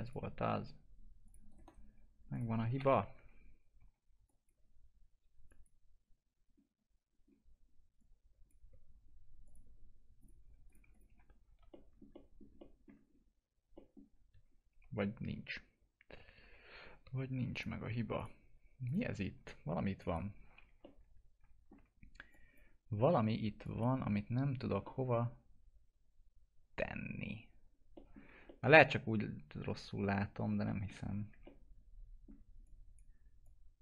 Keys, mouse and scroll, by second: 0.0 click, 1.4 right click, 1.9 2, 2.3 click, 2.7 ctrl+BackSpace, 3.7 1, 4.2 click, 6.5 scroll up 1, 7.9 click, 8.9-9.4 scroll down 1, 9.4 click, 11.0 F4, 11.6 alt+middle click, 12.5 alt+middle click, 13.0 scroll up 1, 13.7 middle click, 14.4-14.9 scroll down 1, 14.9 F4, 17.5 click, 19.2 F4, 19.9 click, 20.8-22.2 alt+middle drag, 22.2 click, 24.4 alt+middle click, 24.8 middle click, 25.2-26.7 scroll up 1, 26.7 F4, 27.9 middle click, 28.1 scroll down 1, 28.7-30.6 alt+middle drag, 30.9 F4, 31.4 alt+middle click, 32.6-33.8 drag.